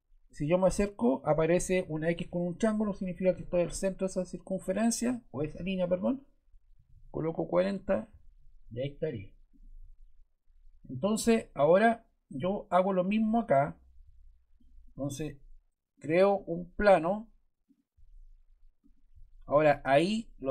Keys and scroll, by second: 6.4-7.4 typing, 7.6 Return.